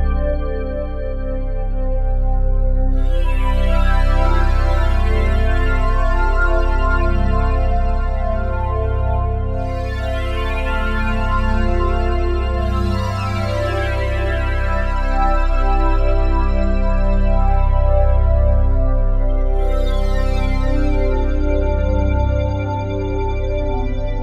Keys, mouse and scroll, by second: 0.0-3.1 drag, 2.1 Tab, 3.1 ctrl+a, 5.4-6.1 typing, 6.5 Tab, 7.6 g, 7.9 x, 9.0 click, 10.0 g, 10.4 z, 11.2 click, 12.4 x, 13.0 click, 14.4 g, 14.7 x, 15.5 click, 16.5 typing, 17.7 click, 18.2-19.2 ctrl+alt+drag, 19.6 shift+click, 20.7-24.2 shift+drag.